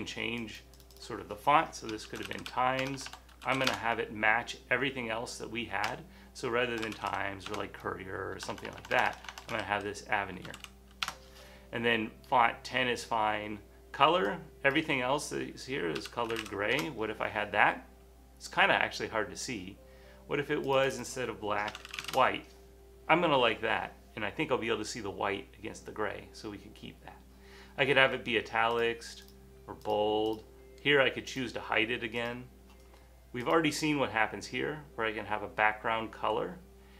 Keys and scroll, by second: 2.0-4.1 typing, 6.1-10.0 typing, 12.0-12.8 typing, 13.9-14.7 typing, 15.9-16.9 typing, 18.7 typing, 21.5-22.5 typing, 24.2 typing.